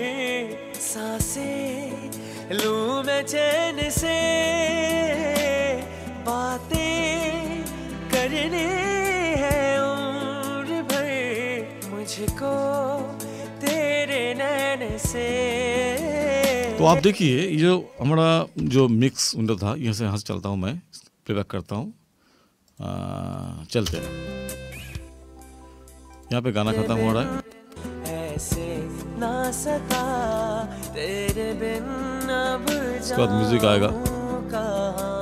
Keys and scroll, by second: 17.0 space, 18.6 ctrl+=, 24.0 space, 30.3 ctrl+=.